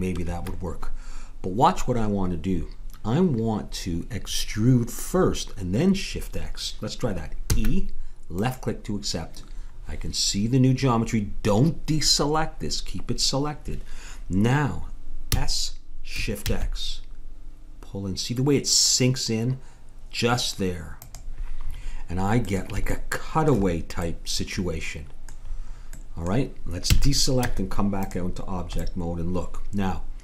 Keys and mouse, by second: 7.5 e, 15.3 s, 21.7 middle click, 21.9-25.4 middle drag, 26.9 a, 27.5 Tab.